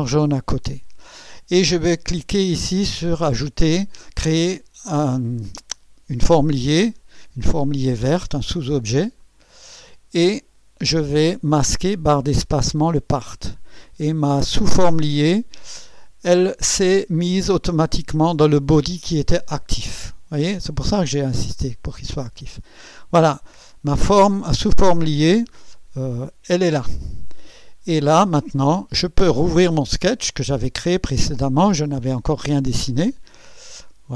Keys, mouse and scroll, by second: 9.2 click, 13.1 click, 13.1 space, 13.2 space, 16.3 click, 26.2-28.7 drag, 29.8 click, 33.4 click.